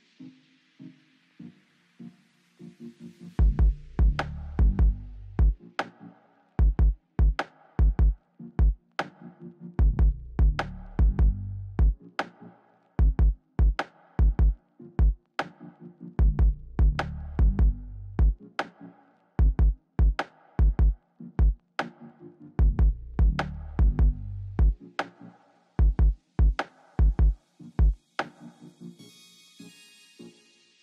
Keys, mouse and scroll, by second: 0.6 Left, 0.9 Down, 1.1 Left, 1.6 right click, 2.6 click, 8.0 click, 9.0 Left, 9.4 Left, 9.4 click, 10.9 click, 10.9 right click, 11.3 Up, 11.3 Right, 12.0 Down, 12.2 Left, 12.9 click, 13.5 Left, 14.1 right click, 15.7 middle click, 15.8 middle click, 16.0-16.6 scroll, 19.2 click, 19.9-20.3 scroll up 10, 21.7 click, 22.2 Right, 22.6 Down, 22.8 click, 24.1 shift+click, 24.5 click, 24.8 middle click, 25.7 Up, 25.7 right click, 25.9 scroll, 26.0 Left, 26.2 Left, 26.5 Left, 26.5 scroll, 26.7 Left, 26.9 Down, 27.2 Right, 27.3 scroll, 27.6 Up, 27.8 right click, 28.2 g, 29.1 g, 29.6 right click, 29.9 right click, 30.4 right click.